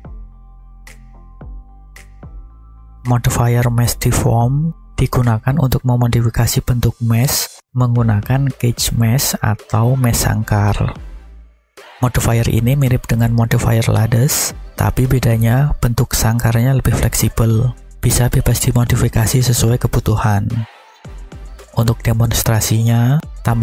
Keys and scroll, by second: 21.1 shift+a.